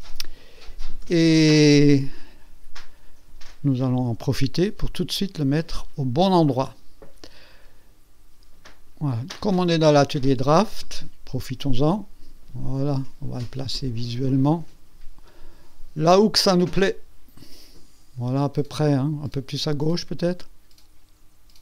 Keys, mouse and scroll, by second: 1.1 Tab, 1.8 click, 8.7 click, 10.8 click, 11.8 click, 16.6 click, 20.2 click.